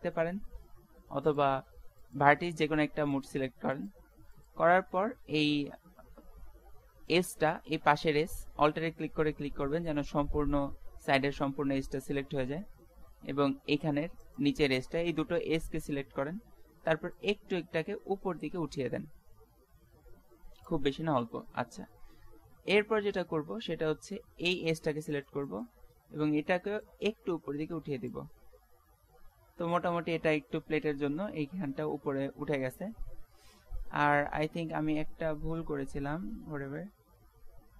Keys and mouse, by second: 7.1-8.9 right drag, 10.0-11.4 middle drag, 14.2-17.2 middle drag, 17.2-19.0 drag, 22.1 middle click, 23.1 middle click, 23.8 middle click, 27.0 middle click, 27.1-28.2 drag, 27.1 right click, 28.2-31.4 middle drag, 34.7-36.4 middle drag, 36.6 ctrl+z, 37.0 ctrl+z, 37.4 ctrl+z.